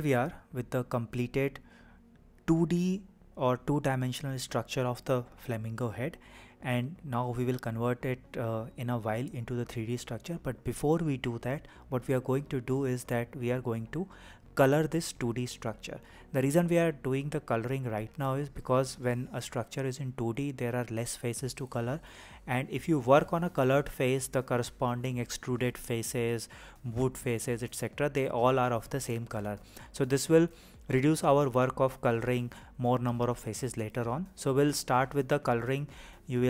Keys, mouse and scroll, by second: 0.0-2.2 typing, 0.3 shift+click, 0.6 click, 1.3 click, 1.8 click, 2.0 shift+click, 2.5 scroll up 1, 2.6 scroll down 3, 2.8 shift+middle click, 3.0-5.2 shift+middle drag, 11.2-15.6 middle drag, 16.6 KP_1, 30.1-30.5 scroll up 1, 30.5-33.5 scroll down 3, 34.1 click.